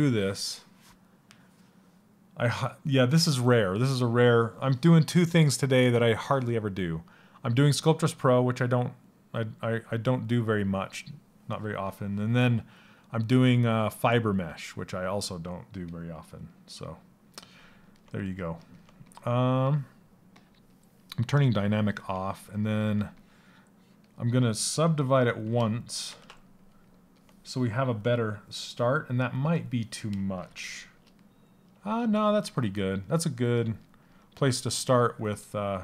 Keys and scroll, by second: 29.9 shift+f, 31.9 s.